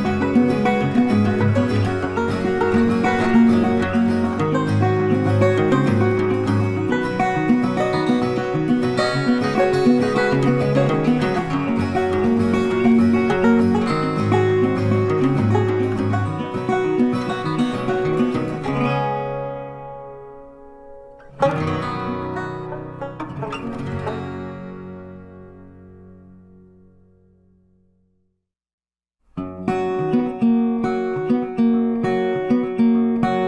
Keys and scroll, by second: 16.8 ctrl+t.